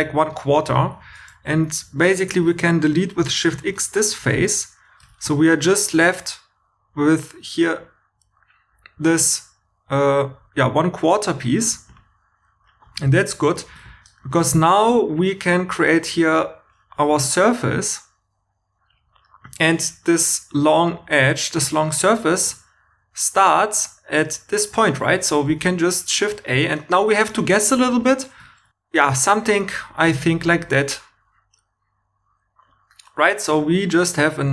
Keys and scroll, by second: 3.2 shift+x, 4.2 2, 5.2 shift+e, 13.4 2, 13.6 shift+e, 25.4 shift+a.